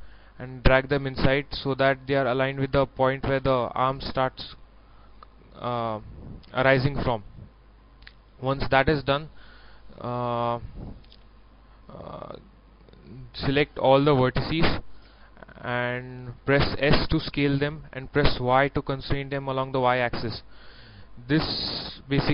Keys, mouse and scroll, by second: 3.2 scroll up 1, 4.0 scroll down 1, 9.5-11.0 middle drag, 12.0 scroll up 1, 14.0 scroll up 1, 14.2 scroll down 1, 14.4 middle click, 15.0 a, 15.6 a, 17.0 s, 18.4 y.